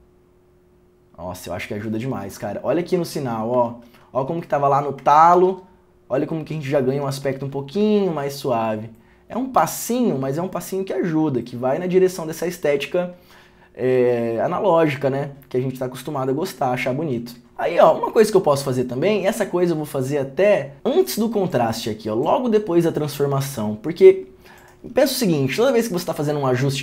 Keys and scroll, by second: 3.8 ctrl+d, 5.5 ctrl+d, 7.5 ctrl+d, 9.7 ctrl+d, 10.1 ctrl+d.